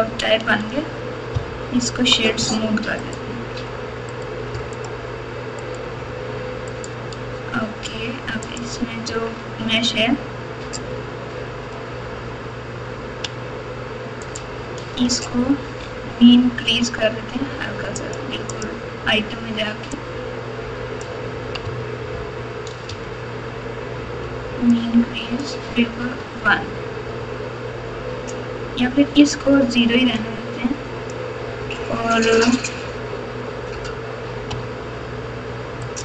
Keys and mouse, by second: 1.3-2.0 ctrl+KP_4, 4.2 right click, 5.7-7.4 right drag, 8.4 click, 9.0 Tab, 16.6 n, 17.9 click, 18.5 click, 19.9-21.0 drag, 21.6 Tab, 22.9 Tab, 24.7 click, 26.2 Tab, 27.0 Tab, 30.1-31.1 drag, 35.8 click.